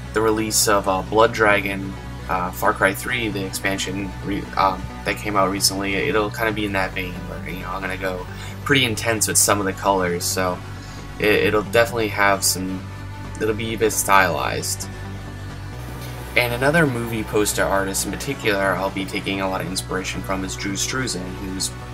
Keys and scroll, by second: 8.0 super+z, 19.5 super+z, 20.1 super+z.